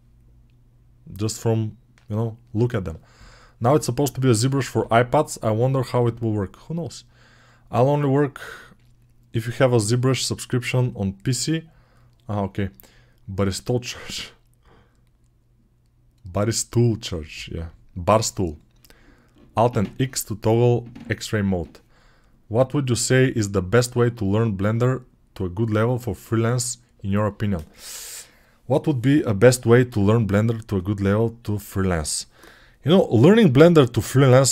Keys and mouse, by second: 34.3-34.5 ctrl+alt+middle drag.